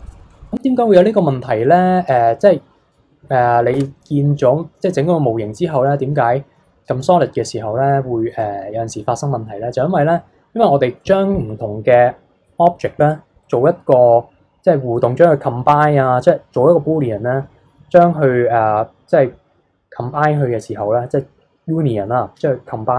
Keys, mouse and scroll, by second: 3.8 Tab, 4.3-7.9 middle drag, 7.9-8.4 scroll up 1, 8.4-11.5 middle drag.